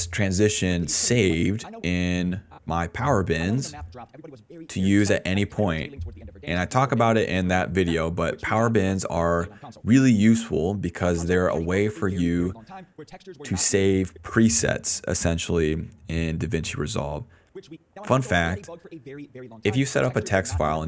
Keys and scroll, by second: 0.5 space, 0.8 d, 1.8 space, 3.3 space, 3.7 s, 9.9 space, 10.8 f, 10.9 space, 11.2 s, 13.8 space, 14.8 a, 15.3 d, 16.6 d, 17.4 space, 19.0 s, 19.4 s.